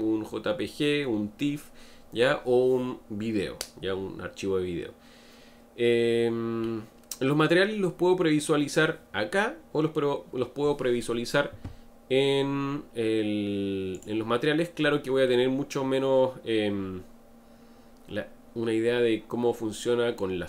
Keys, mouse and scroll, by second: 14.0 click, 15.3-18.3 middle drag.